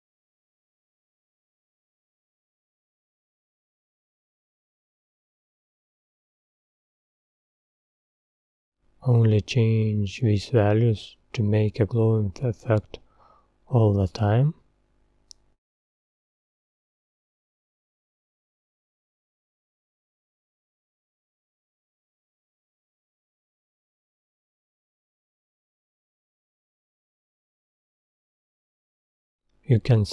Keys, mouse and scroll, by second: 1.6 click, 2.9 ctrl+v, 5.1-7.1 middle drag, 7.1-7.7 scroll up 6, 8.9 Tab, 11.1-12.3 drag, 12.3 scroll down 3, 12.6-15.0 middle drag, 15.0-16.1 scroll down 8, 17.6 scroll down 1, 18.4 scroll down 1, 18.6 click, 20.7-22.5 middle drag, 22.5-23.0 scroll up 6, 23.0-24.0 middle drag, 24.0-25.1 scroll down 11, 25.1-27.1 middle drag, 27.1-27.5 scroll up 4.